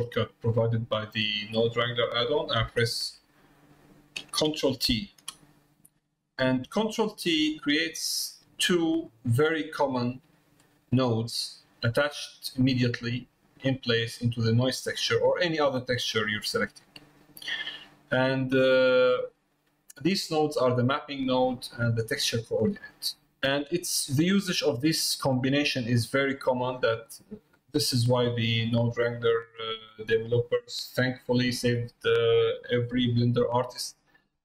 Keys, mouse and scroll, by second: 7.9 middle click, 8.9 middle click, 13.8 middle click, 17.8 middle click, 18.9 middle click, 20.4 click, 22.4 click, 27.5-28.8 drag, 29.7-31.1 drag, 31.4 middle click, 33.8 middle click.